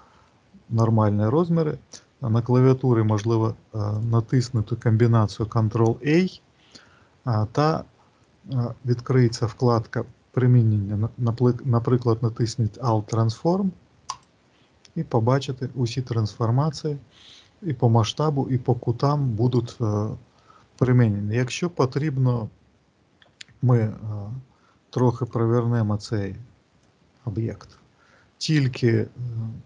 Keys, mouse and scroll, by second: 3.8 click, 5.3 ctrl+a, 23.0 e, 25.0 click, 26.7 click.